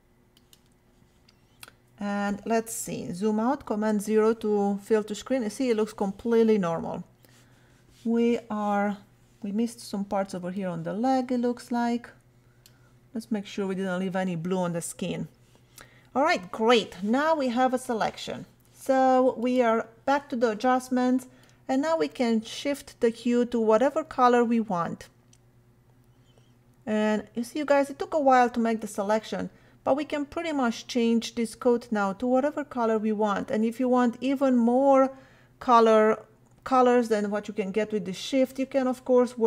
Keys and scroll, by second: 3.7 super+0, 9.7 ].